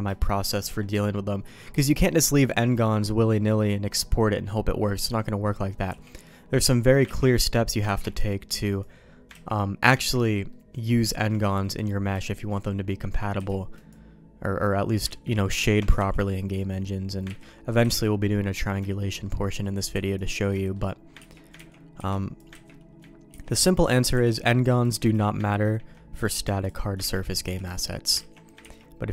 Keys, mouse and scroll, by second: 0.1 shift+middle click, 5.4 middle click, 5.8 b, 7.0 ctrl+q, 7.8 ctrl+x, 8.1 b, 9.3 ctrl+q, 9.9 ctrl+x, 10.4 middle click, 11.0 shift+middle click, 11.4 middle click, 12.1 shift+middle click, 12.6 middle click, 13.3 b, 15.0 ctrl+q, 15.6 ctrl+x, 15.9 b, 17.4 ctrl+q, 17.8 ctrl+x, 18.4 middle click, 18.8 shift+middle click, 19.4 middle click, 19.9 b, 20.5 shift+middle click, 21.1 ctrl+q, 21.5 ctrl+x, 21.9 b, 22.5 ctrl+q, 23.2 ctrl+x, 23.5 middle click, 24.1 b, 25.0 ctrl+q, 26.6 click, 26.9 ctrl+x, 27.4 b, 28.3 ctrl+q, 28.6 ctrl+x.